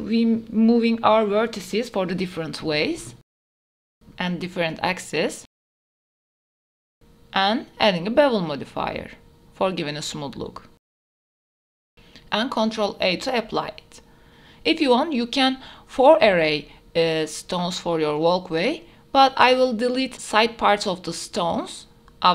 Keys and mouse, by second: 0.4 click, 1.0 g, 1.2 z, 1.9 click, 2.5 click, 2.9 g, 3.1 x, 3.5 click, 4.3 g, 4.6 z, 5.3 click, 6.0 g, 6.1 z, 6.5 g, 6.5 x, 6.7-7.2 drag, 7.6 click, 9.2 click, 9.6 middle click, 10.9 middle click, 11.6 ctrl+a, 12.1 middle click, 13.5 middle click, 13.9 s, 14.3 middle drag, 14.9-17.2 typing, 16.8 click, 18.8 r, 20.0 g, 20.8 click, 21.8 shift+d.